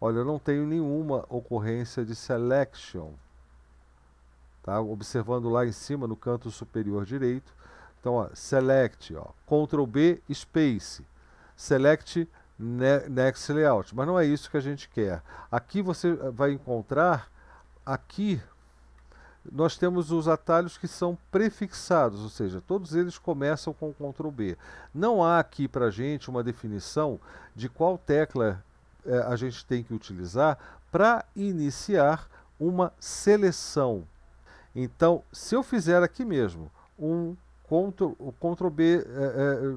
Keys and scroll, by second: 0.8 typing, 1.8 typing, 3.1 typing, 17.5 Down, 17.6 Down, 17.7 Down, 17.9 Down, 18.1 Down, 18.4 Down, 19.0-23.1 Down, 23.4 Up, 24.0-27.7 Up.